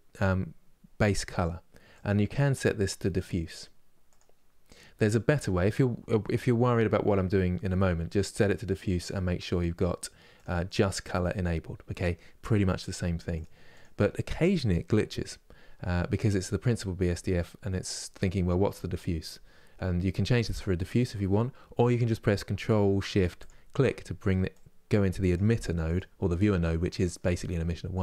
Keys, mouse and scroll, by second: 10.0-25.6 drag.